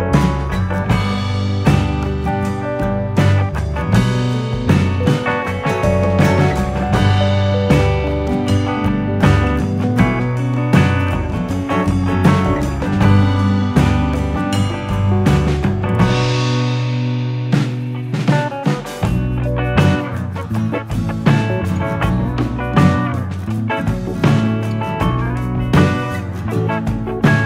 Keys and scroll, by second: 8.8 p, 23.4 p.